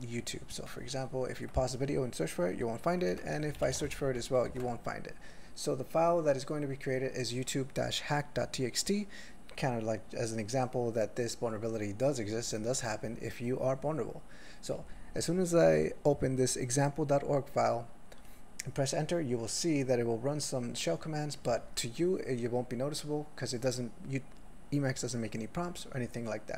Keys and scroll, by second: 3.1 ctrl+s, 3.4-3.9 typing, 4.5 ctrl+g.